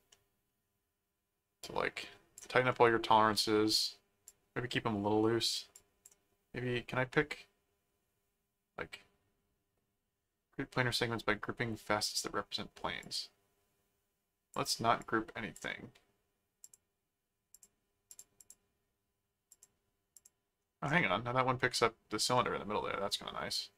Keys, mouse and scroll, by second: 0.1 middle click, 1.6 click, 2.7 middle click, 4.3 click, 5.8 click, 13.0-14.5 drag, 15.0 click, 16.6 click, 17.5-18.9 drag, 19.5 click, 20.1 click, 20.8 middle click, 22.3-23.7 middle drag.